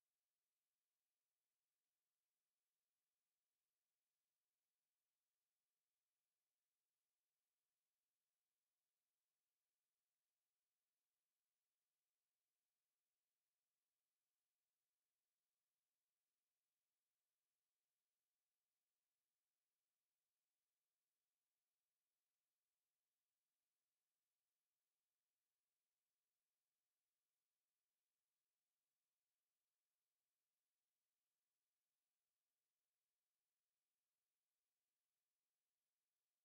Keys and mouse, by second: 0.1 alt+middle click, 0.4 alt+click, 2.1 click, 6.8 alt+click, 8.5 alt+middle click, 10.6 ctrl+e, 11.6 ctrl+click, 12.1 ctrl+click, 13.2 ctrl+click, 14.6 ctrl+click, 15.8 click, 16.1 alt+click, 17.1 alt+right click, 18.3 alt+middle click, 18.3 alt+middle click, 19.8 alt+click, 20.6 click, 21.0 shift+click, 21.6 ctrl+z, 22.0 shift+click, 22.1 shift+click, 23.3 click, 23.9 shift+click, 24.1 shift+click, 24.8 shift+right click, 25.8 alt+click, 26.8 alt+middle click, 27.7 click, 28.1 click, 28.5 alt+click, 29.1 alt+click, 30.2 alt+right click, 30.6 alt+click, 31.3 alt+middle click, 34.9 alt+click, 35.7 click, 36.2 alt+click.